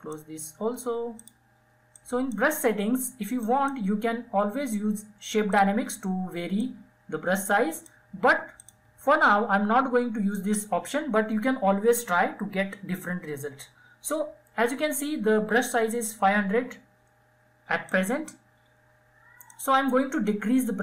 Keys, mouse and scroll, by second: 3.1-7.3 drag, 16.6-20.7 drag, 20.7 [.